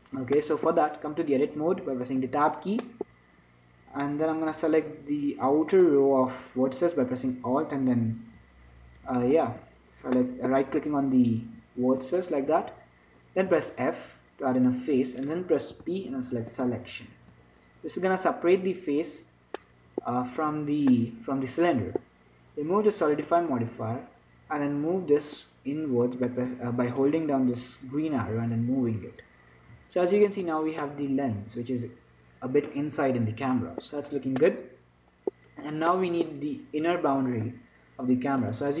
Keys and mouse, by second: 0.7-2.5 middle drag, 2.5 Tab, 3.2-5.2 drag, 5.2 middle click, 8.1-10.5 right drag, 10.5 click, 10.5-12.3 middle drag, 12.3-14.1 right drag, 13.8 f, 16.0 p, 19.2 Tab, 19.9-21.0 drag, 21.0-23.5 middle drag, 21.9 click, 23.5-29.2 drag, 31.1-33.0 middle drag, 34.2-38.8 middle drag.